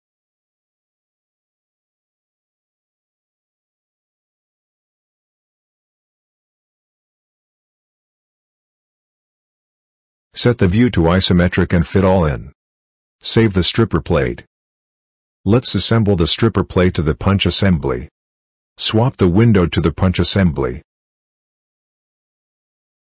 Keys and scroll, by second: 13.4 ctrl+s.